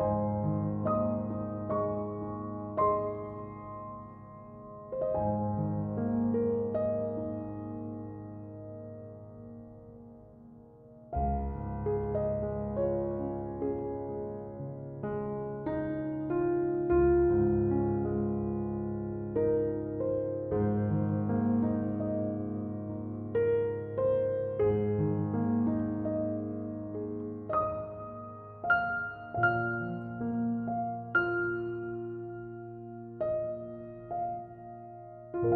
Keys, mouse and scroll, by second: 3.2-4.1 middle drag, 4.1 Tab, 4.5-6.1 middle drag, 6.1 Tab, 6.7 KP_1, 7.2 r, 9.2-9.9 middle drag, 9.9 Tab, 11.1 click, 11.6 right click, 12.0-12.6 middle drag, 12.6 shift+right drag, 12.8-13.6 middle drag, 13.6-14.6 scroll up 1, 14.6 i, 19.2 click, 20.3-21.6 alt+right drag, 23.8-24.5 alt+shift+right drag, 24.5-26.3 scroll up 2, 26.4 F3, 30.3-31.5 middle drag, 31.5 Tab, 32.3 middle click, 33.0 ctrl+a, 35.1-35.5 middle drag.